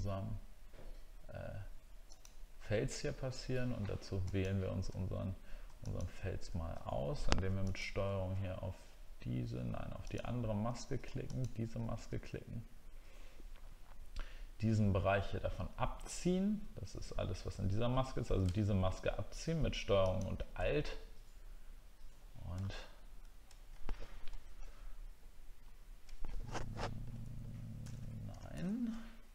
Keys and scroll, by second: 22.6 alt+scroll up 1, 23.1 alt+scroll down 1, 24.8 alt+scroll down 1, 25.6 alt+scroll up 1.